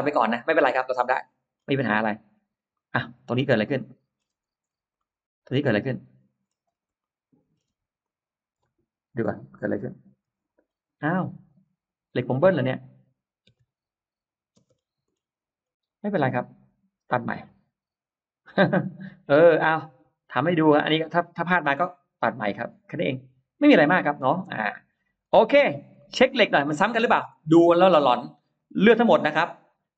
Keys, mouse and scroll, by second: 0.1 middle click, 0.3-0.9 scroll down 2, 0.9 middle click, 1.7-2.7 scroll up 2, 2.7-4.0 middle drag, 4.0-4.3 scroll down 1, 4.3 space, 4.5 scroll up 1, 5.0 middle click, 6.0-6.8 scroll up 2, 6.8 middle click, 7.6 space, 7.9 click, 9.0 Delete, 9.7 click, 10.2 Delete, 10.3-11.2 scroll down 4, 11.6-12.2 scroll up 4, 12.4 click, 13.3 m, 13.4 click, 14.4 space, 14.5 middle click, 15.0 middle click, 15.9 click, 17.3-18.4 drag, 18.6 middle click, 19.0 middle click, 20.6 click, 22.1 click, 22.7-24.0 middle drag, 24.8 scroll down 1, 24.8 space, 25.2 middle click, 25.2 scroll up 1, 25.5-26.4 scroll down 2, 25.8 middle click, 26.8 click, 27.2 middle click, 27.8-28.2 scroll up 1, 28.4 click.